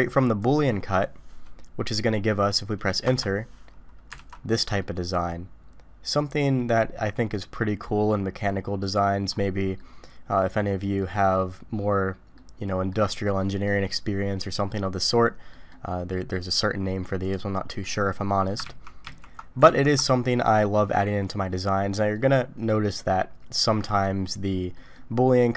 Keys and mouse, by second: 4.2 alt+a, 4.8-9.0 middle drag, 9.8-11.0 middle drag, 12.3-12.9 middle drag, 13.7-15.1 middle drag, 15.5 middle click, 17.8 middle click, 18.3 middle click, 18.6 ctrl+z, 19.9 ctrl+z, 20.2 middle click, 22.1-22.8 middle drag, 24.7 middle click.